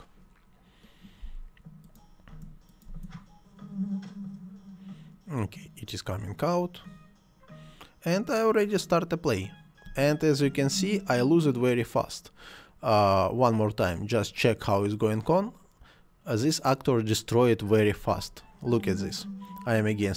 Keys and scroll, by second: 2.2 space, 9.8 space, 17.9 space.